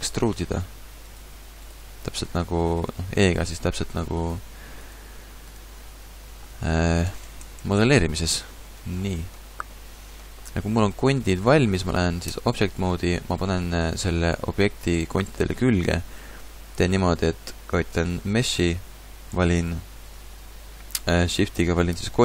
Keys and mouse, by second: 0.0 e, 1.2-5.1 typing, 6.5 ctrl+z, 6.7-8.2 ctrl+z, 11.8 middle click, 12.3 Tab.